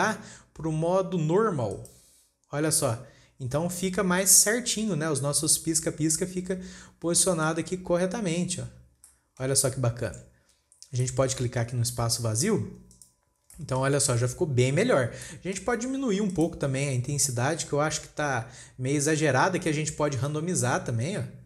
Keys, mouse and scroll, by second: 0.1-3.3 drag, 4.6-5.0 scroll up 2, 5.0-5.5 shift+middle drag, 5.5-6.5 scroll up 3, 6.5-7.2 scroll up 1, 7.2-7.6 scroll up 3, 7.6-8.7 shift+middle drag, 8.7-9.6 scroll down 16, 9.6 shift+middle click, 10.1-10.7 scroll down 7, 10.7-11.5 scroll up 3, 11.5-13.4 shift+middle drag, 13.4 click, 14.0-14.5 shift+middle drag, 14.5 scroll down 2, 14.8-15.3 scroll up 5, 15.6-16.8 shift+middle drag, 16.8 click, 20.7-21.4 drag.